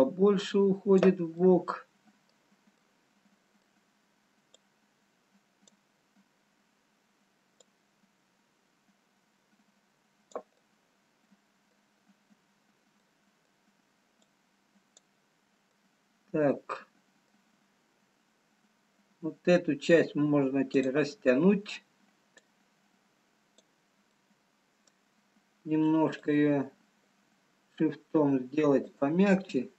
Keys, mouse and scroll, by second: 2.5 middle click, 4.5 middle click, 5.6 click, 11.0 middle click, 14.4 middle click, 14.4 click, 15.7 middle click, 18.2-19.4 scroll down 2, 20.9 click, 24.9 middle click, 26.7 shift+click.